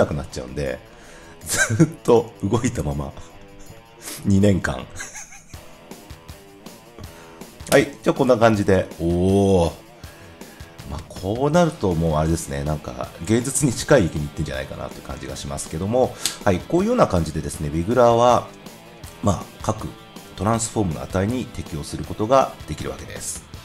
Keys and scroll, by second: 7.6 0.